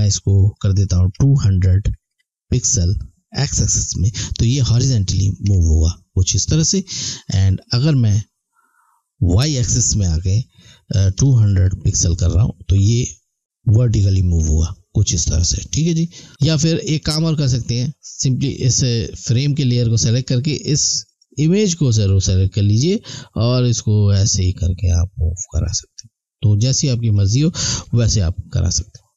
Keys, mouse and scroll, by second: 7.9 click, 15.8 alt+Num_Lock, 15.8 alt+scroll down 1, 21.0 click, 27.8 alt+scroll down 1, 28.8-29.1 alt+scroll up 1.